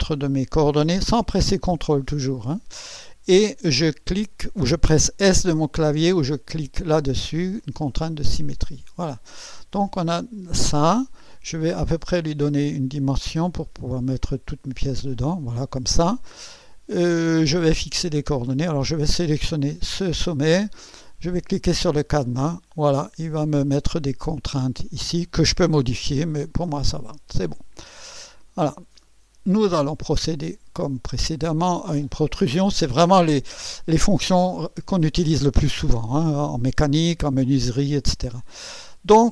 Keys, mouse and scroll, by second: 1.5 click, 8.0 click, 12.0-15.3 drag, 19.1 click, 22.1 click, 26.8 click, 28.2 click, 30.8 click.